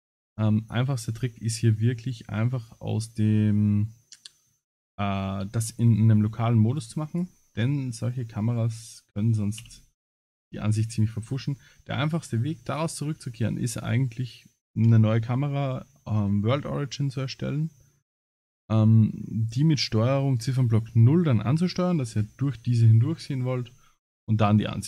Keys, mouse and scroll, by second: 0.2 scroll up 5, 0.6 click, 1.2 middle click, 5.2 middle click, 5.9 middle click, 6.7 click, 7.1 click, 8.6 scroll up 4, 9.6 h, 10.1-10.8 scroll down 16, 10.8-11.7 scroll up 11.